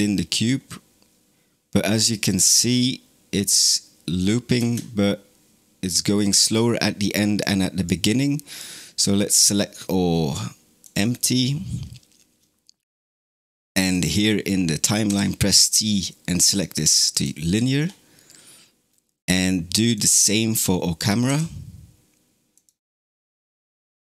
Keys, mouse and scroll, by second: 4.4 space, 5.8-9.0 drag, 10.7 click, 13.8 click, 14.9 t, 19.8 click, 20.8 click, 21.1 t, 23.2 space.